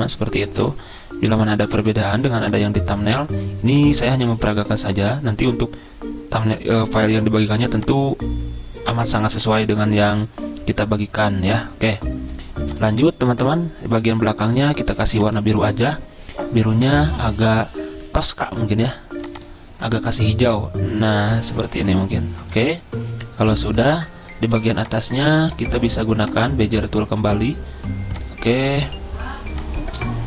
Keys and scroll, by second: 24.6 z.